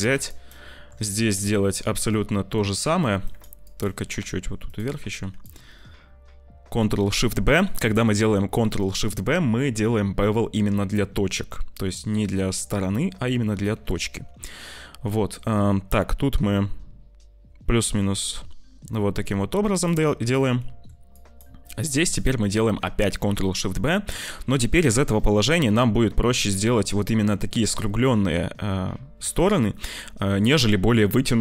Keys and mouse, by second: 0.3 shift+right click, 3.3 click, 3.5 click, 3.9 g, 5.1 click, 13.4 ctrl+shift+b, 20.4 shift+click, 21.2 click, 24.7 ctrl+shift+b.